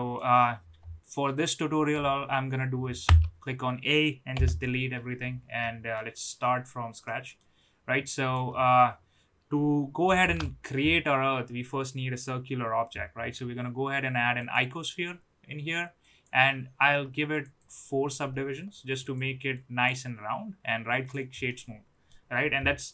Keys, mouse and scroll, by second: 3.0 a, 4.3 Delete, 5.6-5.9 middle drag, 7.0-7.3 middle drag, 8.0-9.1 middle drag, 10.2 shift+a, 16.1 click, 17.7 click, 19.3 right click, 21.4-22.0 middle drag.